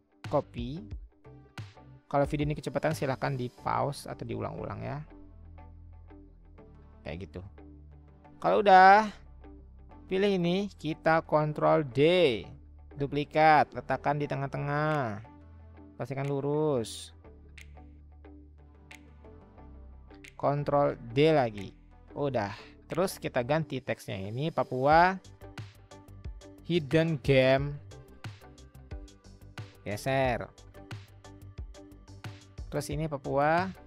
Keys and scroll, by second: 0.2 ctrl+c, 2.6 ctrl+c, 3.5 ctrl+v, 4.8 Left, 5.3 Left, 6.0-6.7 typing, 21.0 ctrl+d, 25.1-28.3 typing, 29.6-30.3 Left, 30.4-31.1 Left, 31.3 Left, 31.6 Left, 31.8 Left, 32.3 Left.